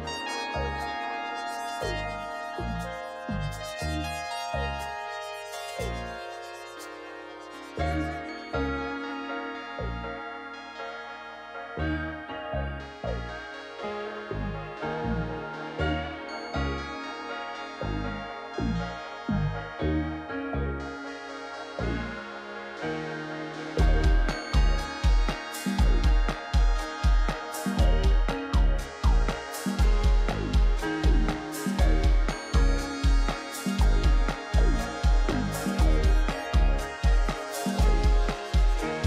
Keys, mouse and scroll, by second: 0.4 scroll, 0.6 scroll down 10.